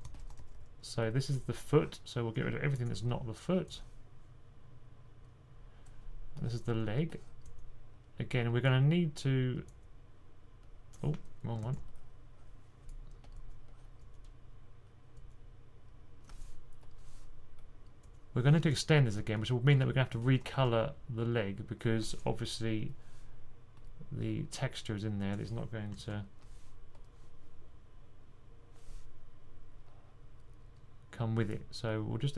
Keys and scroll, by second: 0.0-0.9 typing, 11.5 super+z, 19.7-20.5 typing, 25.8 super+z.